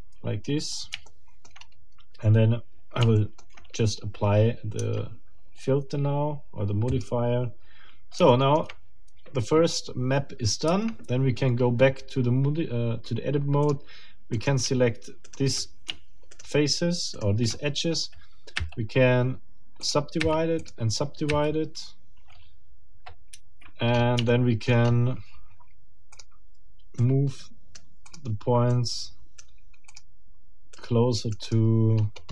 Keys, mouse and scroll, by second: 0.3 ctrl+scroll down 2, 1.1 shift+middle click, 1.8 shift+scroll down 2, 3.1 shift+middle click, 3.7 shift+scroll down 2, 4.8 Tab, 6.9 click, 8.3 shift+middle click, 10.7 Tab, 13.6 click, 14.3 shift+middle click, 15.3 shift+right click, 16.3 shift+right click, 17.1 shift+right click, 18.6 w, 19.8 click, 20.2 w, 20.6 click, 23.3 Escape, 23.9 scroll up 2, 24.3 shift+middle click, 24.8 shift+scroll up 2, 26.1 click, 27.0 right click, 28.1 click, 28.7 right click, 29.9 click, 30.7 right click, 31.5 click, 31.9-32.3 scroll down 1.